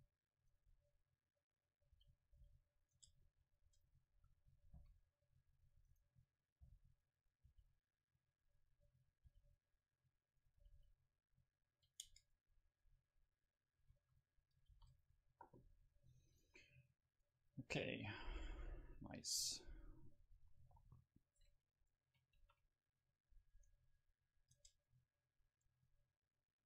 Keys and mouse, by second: 0.6-2.3 drag, 2.0 r, 2.3 middle click, 2.4 g, 3.0 Tab, 3.0-4.8 drag, 3.3-5.5 middle drag, 3.7 Tab, 4.2 a, 4.8 c, 5.9-10.3 drag, 6.1-7.5 middle drag, 6.6 g, 7.5 r, 9.3 r, 10.3 middle click, 10.4-13.8 drag, 10.6 r, 12.1 Tab, 13.8 a, 14.1 a, 14.7 ctrl+s, 16.3-18.1 drag, 18.1-19.5 middle drag, 20.8 KP_1, 22.4-23.7 middle drag, 22.4 shift+a, 24.3 middle click, 24.6 Tab.